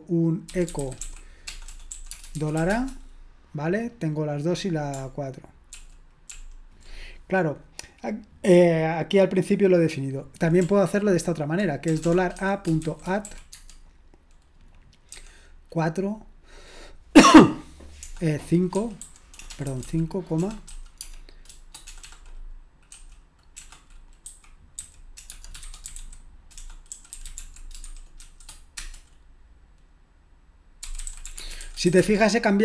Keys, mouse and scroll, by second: 0.4-3.1 typing, 5.7 ctrl+p, 6.3 ctrl+p, 11.3-13.8 typing, 18.8-22.9 typing, 24.2-28.8 typing, 30.7-32.6 typing.